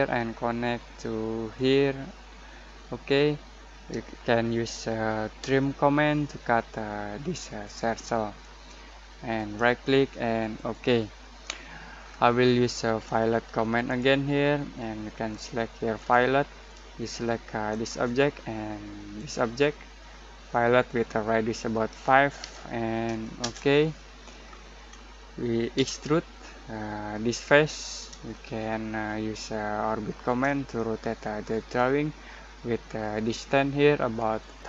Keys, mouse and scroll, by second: 5.4 t, 7.6 click, 9.3 right click, 10.5 click, 12.0 scroll down 1, 13.8 click, 15.8 click, 22.4 5, 23.4 Return, 24.4-24.8 scroll down 1, 24.8-25.7 scroll up 1, 25.7 e, 27.2 click, 27.5 click, 28.3-34.4 shift+middle drag, 34.4 click.